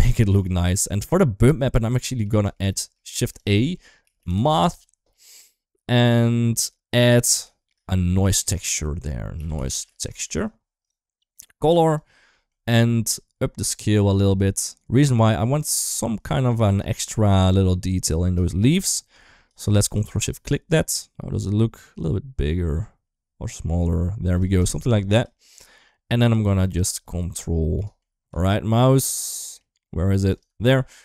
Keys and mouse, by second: 0.0 shift+middle click, 2.1 shift+middle click, 2.6 shift+middle click, 2.9 shift+a, 6.8 click, 7.2 shift+middle click, 8.0-10.6 drag, 11.2-11.8 drag, 12.1 middle click, 12.9 click, 16.0 middle click, 18.9 click, 19.9 ctrl+shift+click, 21.2-25.0 drag, 27.6 middle click, 29.1 middle click, 30.1 ctrl+right click, 30.5 middle click.